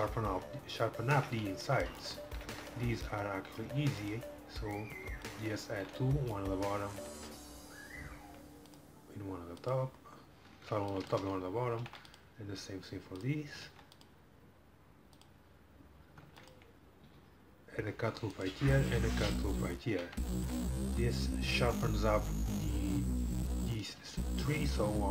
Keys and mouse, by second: 1.2 Tab, 3.7 ctrl+r, 5.8 ctrl+r, 11.8 ctrl+r, 13.7 ctrl+r, 16.3 ctrl+r, 19.1 ctrl+r, 20.6 Tab, 20.8 middle click.